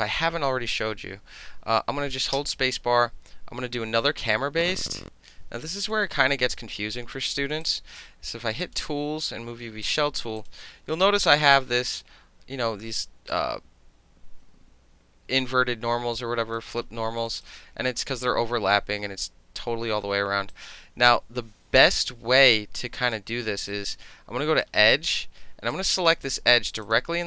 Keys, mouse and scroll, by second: 2.3 space, 3.7-5.9 drag, 7.6 click, 8.6 click, 9.3-9.8 middle drag, 9.8 click, 10.4 click, 10.9 alt+middle click, 11.5-13.3 alt+drag, 16.6 alt+right click, 16.8 alt+middle click, 17.2 alt+middle click, 17.3 alt+right click, 17.4-20.5 alt+middle drag, 20.5-23.1 alt+drag, 23.1-23.7 alt+middle drag, 23.7-24.6 alt+right drag, 24.6-25.7 alt+middle drag, 25.7 alt+click, 25.8-26.8 alt+middle drag, 26.8 shift+click, 26.9-27.2 shift+middle drag.